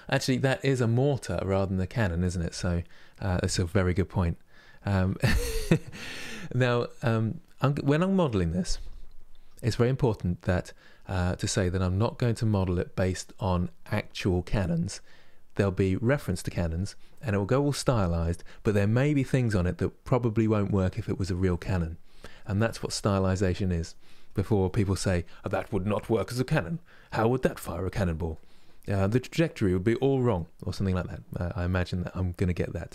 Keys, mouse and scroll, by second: 28.0-31.4 middle drag, 31.4-32.0 scroll up 2, 32.0-32.9 middle drag.